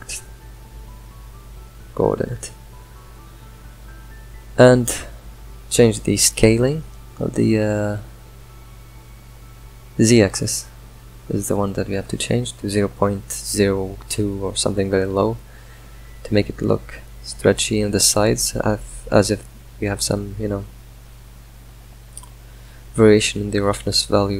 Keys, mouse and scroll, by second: 0.4 drag, 4.2-6.2 middle drag, 6.2-7.5 drag, 8.0-9.9 drag, 9.9-11.5 middle drag, 11.5-18.1 drag, 18.4-21.1 shift+drag, 22.0-24.3 middle drag.